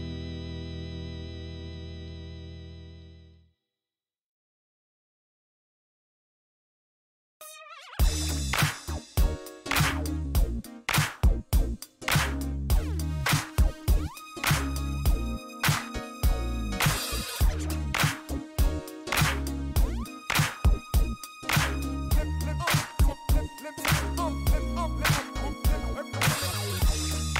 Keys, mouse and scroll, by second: 1.2 click, 3.6 click, 5.0 click, 6.5 click, 8.3-9.2 typing, 11.0 click, 13.0 click, 13.5 click, 14.8 click, 17.0 click, 19.0 click, 20.2 click, 22.0 click, 23.4 click, 23.9 click, 25.2 click, 26.0 middle click, 26.5 scroll up 1.